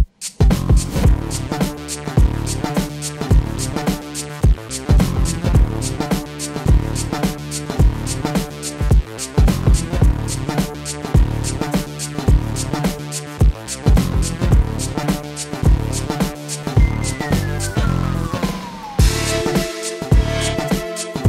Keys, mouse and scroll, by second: 0.0-0.7 typing, 0.2 shift+middle click, 0.9 click, 1.1 click, 1.8 click, 2.7 space, 3.9 space, 4.9 click, 6.0 middle drag, 6.8 KP_7, 7.7 shift+d, 8.4 r, 10.0 g, 11.2-12.5 drag, 11.3 BackSpace, 12.7 space, 13.6 shift+space, 13.7 shift+middle click, 14.5 drag, 16.5 click, 17.4 click, 19.1 shift+middle click, 19.6-20.7 shift+middle drag, 20.9-21.2 drag.